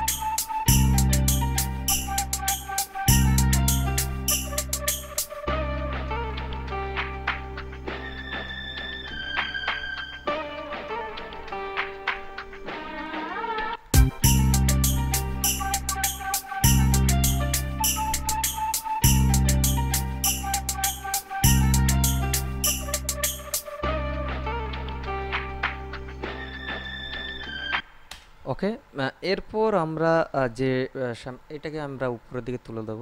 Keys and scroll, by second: 13.9 space, 28.0 space.